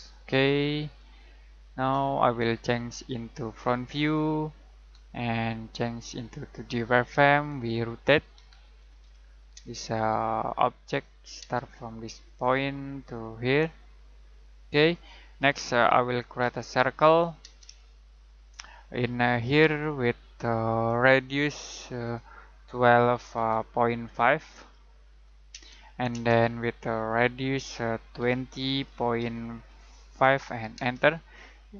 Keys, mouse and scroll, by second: 3.2 click, 8.3-9.6 typing, 10.5 click, 11.4 space, 12.4 click, 16.4 c, 17.4 space, 17.8 shift+middle click, 18.5 middle click, 19.0-19.6 scroll down 1, 19.6 click, 22.9-25.6 typing, 27.1 click, 28.2-28.7 typing, 30.0-30.7 typing.